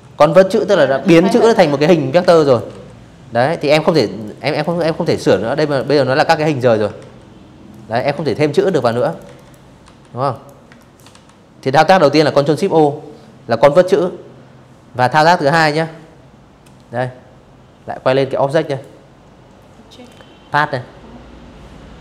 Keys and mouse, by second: 0.0 click, 0.4 v, 1.9 click, 2.2 click, 2.3 click, 2.7 click, 2.8 click, 3.4 click, 3.5 click, 3.9 click, 4.7 ctrl+z, 5.4 click, 5.8 ctrl+z, 6.2 click, 6.4 click, 6.6 click, 6.7 click, 6.9 z, 7.0 click, 7.5 v, 8.0 click, 8.5 click, 8.8 v, 16.3 click.